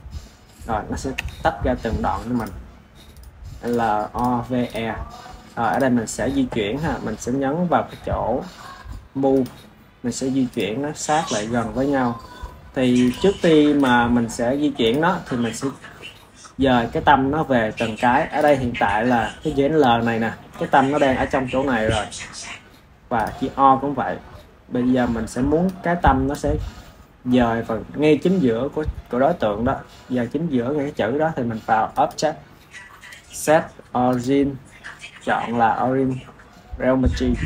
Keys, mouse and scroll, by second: 1.0 Tab, 2.2 click, 3.0 click, 3.5 click, 4.0 click, 4.5 click, 5.6 click, 9.2-10.4 drag, 12.9 click, 13.6 click, 14.7 click, 18.2 click, 23.1 click, 25.6 click, 31.8-35.0 drag.